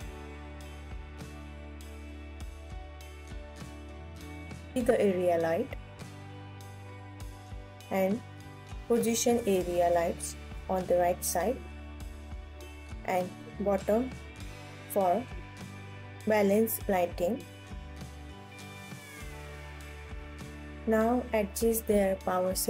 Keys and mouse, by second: 0.3 ctrl+s, 2.9 KP_1, 4.3 shift+d, 5.4 r, 7.2 click, 7.4 g, 8.3 click, 9.2 click, 11.0 KP_7, 12.1 g, 13.5 KP_1, 14.8 shift+d, 15.7 click, 16.4 KP_7, 17.4 g, 18.8 click, 19.8 KP_0, 20.8-22.0 alt+drag.